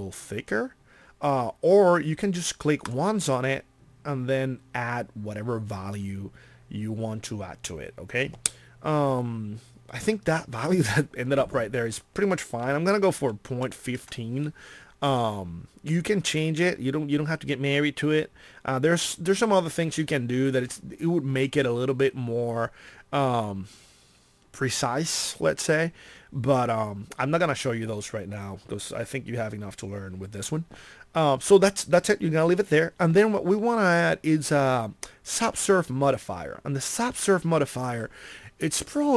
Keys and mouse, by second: 36.0-38.6 middle drag.